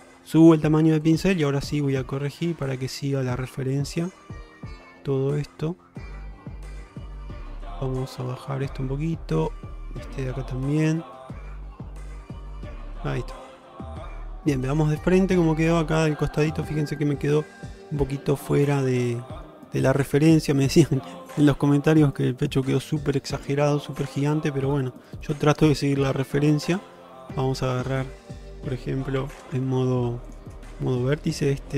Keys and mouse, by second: 1.2-3.0 drag, 3.6 shift+middle click, 7.0-8.1 drag, 8.3 shift+middle click, 9.6-10.9 drag, 12.0 click, 13.0 shift+middle click, 13.3-14.4 middle drag, 14.6 alt+z, 15.1 shift+middle click, 16.6-19.5 middle drag, 24.1 shift+middle click, 24.7-27.3 middle drag, 28.0 middle click, 29.3 Tab, 30.3 click, 30.8-31.7 middle drag.